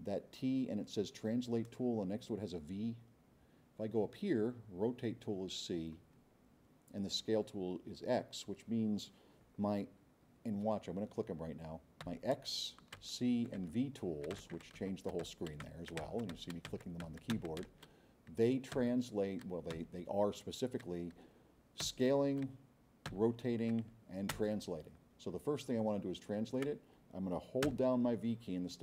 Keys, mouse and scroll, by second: 12.0-18.9 typing, 23.1 c, 24.3 v, 28.4 v.